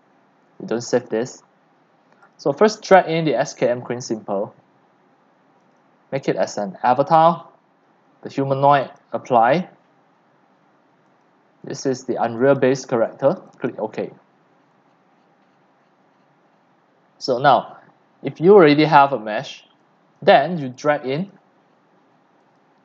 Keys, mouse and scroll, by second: 0.0-19.8 drag, 21.3 click, 22.6 click.